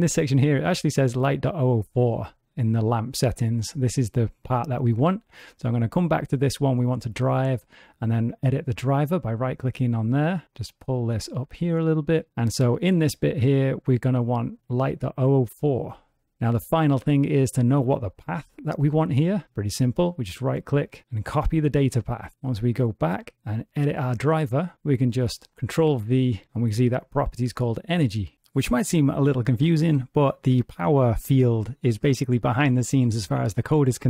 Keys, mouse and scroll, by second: 5.6 click, 7.5 right click, 19.8 right click, 22.7 right click.